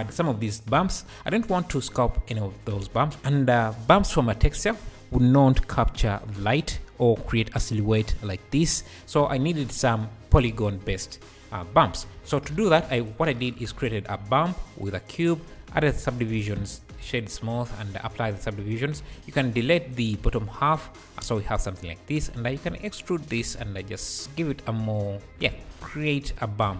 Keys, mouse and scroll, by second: 0.1-0.9 scroll down 2, 12.5-12.9 shift+drag, 12.9-14.9 shift+right drag, 13.6 shift+a, 15.2-15.7 scroll down 3, 15.7 ctrl+2, 16.7 shift+q, 16.9 right click, 17.0 KP_1, 18.0 ctrl+a, 18.6 Tab, 19.1 alt+z, 19.5 click, 20.3 x, 20.7 x, 21.6 alt+click, 22.4 e, 23.6 s, 24.9 alt+click, 25.3 Tab, 25.4 alt+z, 25.8 `.